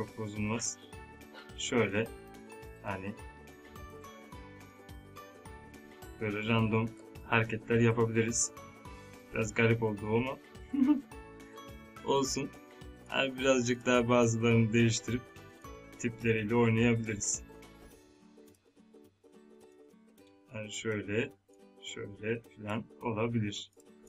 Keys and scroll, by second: 6.9 ctrl+Num_Lock, 17.0 ctrl+z.